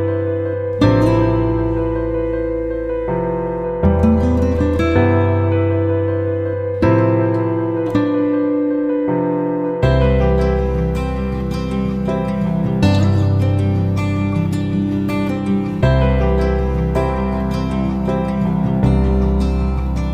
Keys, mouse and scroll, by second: 10.5 shift+Down, 10.6 shift+Down, 12.0 click, 14.8 alt+Right, 15.0 alt+Right, 15.2 alt+Right, 17.9-20.0 drag.